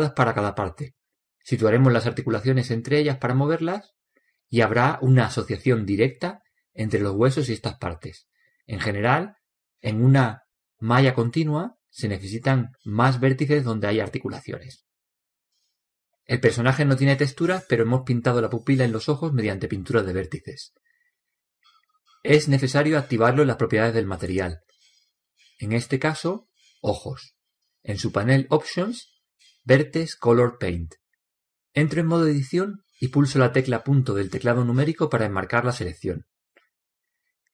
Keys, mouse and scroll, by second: 2.7 l, 3.9 l, 4.7 l, 5.4 l, 7.7 ctrl+z, 8.1 ctrl+z, 9.2-12.7 middle drag, 10.1 Tab, 14.7 n, 16.1-18.1 middle drag, 24.5-27.5 drag, 27.6 drag, 33.2 Tab, 35.7 KP_Decimal.